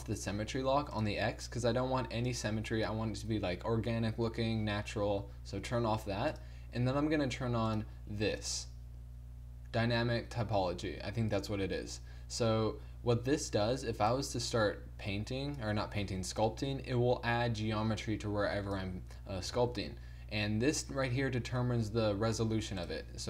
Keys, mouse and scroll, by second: 16.1 ctrl+z, 22.0 ctrl+z.